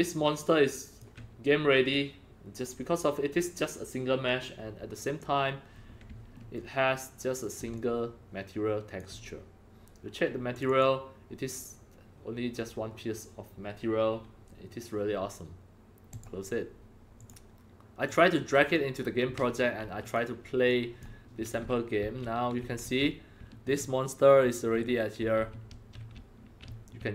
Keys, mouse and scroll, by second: 4.9 scroll down 2, 5.7-6.0 scroll up 2, 6.3-9.4 alt+middle drag, 7.7-8.9 alt+drag, 9.4-10.8 alt+drag, 16.1 click, 17.1 click, 18.0 click, 20.0 click, 20.2 click, 20.7-27.1 typing.